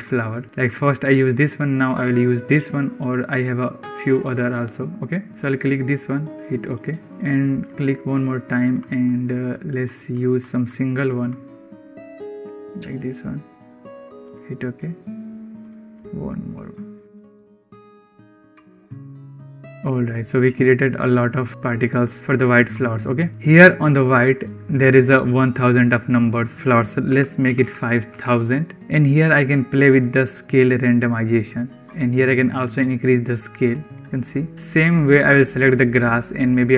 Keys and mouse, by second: 7.1-14.4 drag, 15.4-19.0 drag, 24.7-28.5 drag, 27.4 0, 29.8-31.2 drag, 31.8-33.8 drag, 35.0 click, 36.3-36.7 drag.